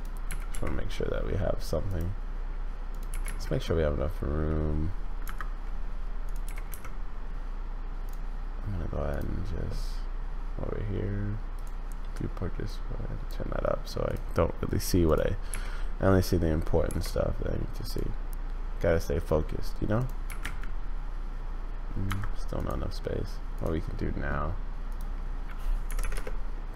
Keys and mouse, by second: 0.2 g, 2.9 click, 3.1 g, 6.4 g, 11.5 click, 12.8 click, 14.1 click, 15.5 g, 20.2 g, 22.6 click, 24.9-26.7 drag.